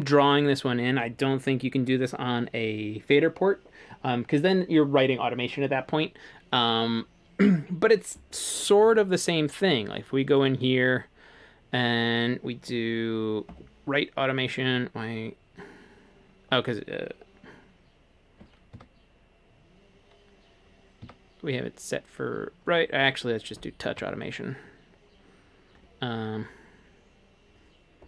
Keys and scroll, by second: 8.9 super+z, 18.8 a, 21.0 a, 24.0 a.